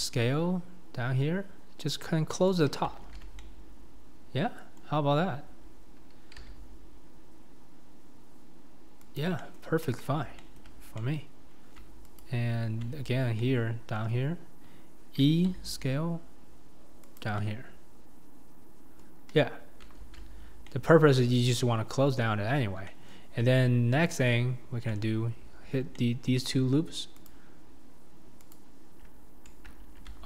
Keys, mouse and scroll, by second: 2.3 middle click, 3.0 alt+z, 3.4-6.4 middle drag, 6.4 s, 9.4 middle click, 10.4 shift+middle click, 10.8 scroll, 11.0-12.2 middle drag, 13.4-15.2 middle drag, 15.2 e, 17.4-19.3 middle drag, 20.0 alt+z, 20.7-22.5 middle drag, 22.9-24.2 middle drag, 24.2 alt+click, 25.9-27.3 middle drag, 27.3 shift+click, 28.5 shift+click.